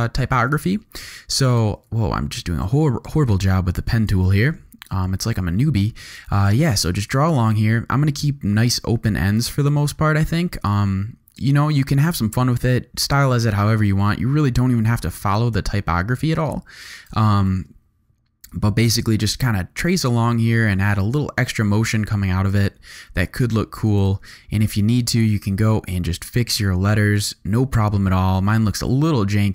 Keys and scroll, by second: 1.8 super+z, 9.5 super+z, 17.4 super+z, 23.4 v, 24.2 alt+super+v.